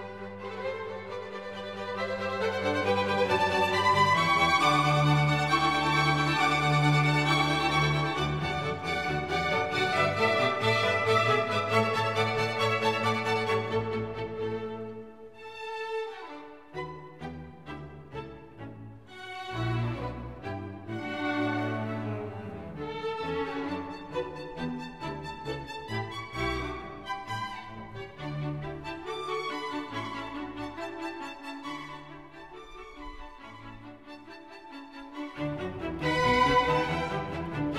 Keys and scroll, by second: 22.8 super+c, 22.9 super+v.